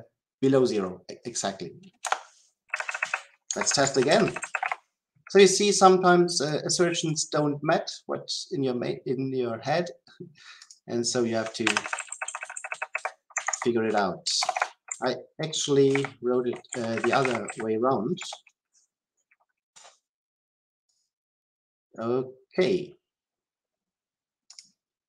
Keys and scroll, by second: 4.5 Delete, 15.8 ctrl+z, 17.1 Delete, 24.5 ctrl+F5.